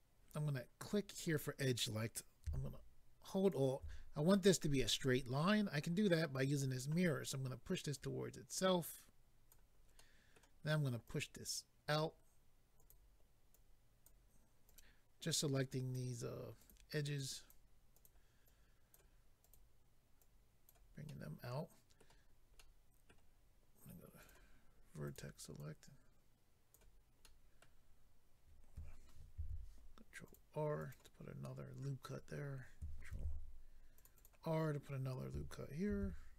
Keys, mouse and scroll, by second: 1.1 click, 3.4 alt+click, 7.9 click, 10.0 middle click, 11.0 click, 12.7 click, 12.9 click, 13.5 click, 14.6 click, 14.7 click, 15.5 click, 16.6 click, 16.7 click, 17.1 click, 18.0 click, 18.0 click, 18.5 click, 19.4 click, 19.5 click, 20.2 click, 21.1 middle click, 22.6 middle click, 24.2 click, 25.0 click, 25.6 click, 27.2 middle click, 30.2 ctrl+r, 30.2 click, 30.8 click, 30.9 click, 31.4 middle click, 33.1 ctrl+r, 33.9 click, 34.0 click, 34.1 click, 34.2 double click, 35.9 ctrl+r.